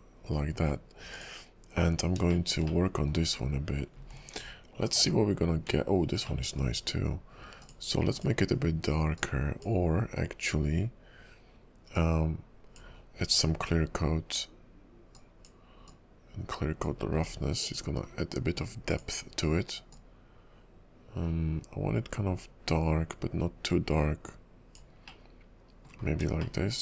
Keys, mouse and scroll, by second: 1.1 click, 2.0 scroll up 2, 2.4 shift+middle click, 2.8 middle click, 4.3 alt+m, 6.4 middle click, 7.6 click, 8.1 click, 11.9 click, 12.9-13.4 scroll down 11, 15.1 scroll down 3, 15.3 click, 15.9 click, 17.0-17.5 scroll up 10, 18.0-18.9 scroll down 3, 18.9 click, 18.9-20.6 scroll down 1, 25.2 middle click, 26.2-26.5 scroll down 3, 26.5 shift+middle click.